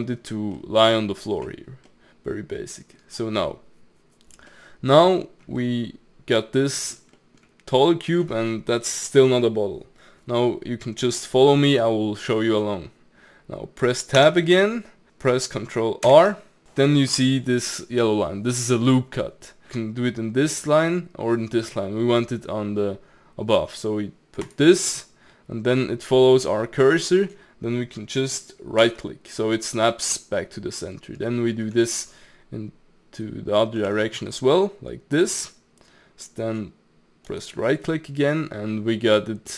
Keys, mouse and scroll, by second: 0.6-1.7 middle drag, 1.7 scroll down 1, 1.9-3.2 middle drag, 3.2-4.5 scroll down 1, 4.5-5.2 middle drag, 5.2-5.6 scroll up 2, 5.6-10.9 middle drag, 11.2-12.2 middle drag, 12.2-14.2 scroll up 1, 14.2 Tab, 14.5 middle click, 16.1 ctrl+r, 29.7-32.7 middle drag, 33.8 ctrl+r, 37.7-39.5 middle drag.